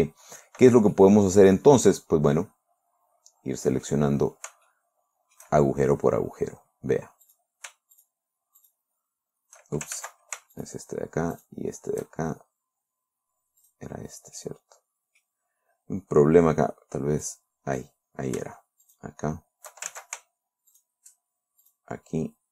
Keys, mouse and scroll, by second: 0.2 scroll up 2, 1.4-4.5 drag, 4.6-5.0 scroll up 1, 5.2 shift+middle click, 7.7 right click, 8.4 shift+right click, 9.1 shift+right click, 10.4 ctrl+shift+z, 11.0 shift+right click, 11.8 shift+right click, 14.1 right click, 14.8-15.9 drag, 17.7 click, 19.3 shift+right click, 20.4 ctrl+shift+z, 21.2 shift+right click, 22.1 shift+right click.